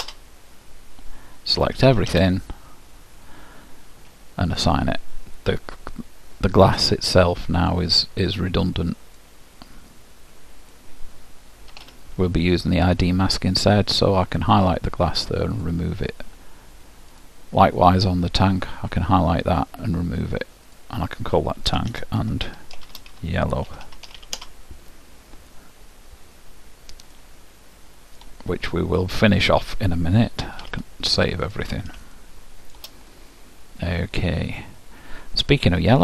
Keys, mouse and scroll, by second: 0.0 s, 1.9 a, 2.2 a, 4.6-6.4 drag, 7.7-9.6 drag, 11.8 Tab, 15.0-22.6 drag, 23.9 l, 27.3-29.0 middle drag, 30.7 ctrl+w, 32.2-35.0 middle drag.